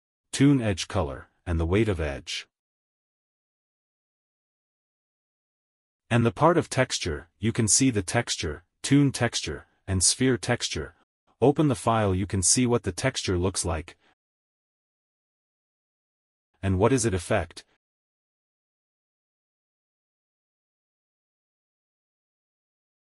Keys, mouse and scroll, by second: 5.7-6.0 scroll down 1, 7.4 middle click, 15.4 click, 17.1 click.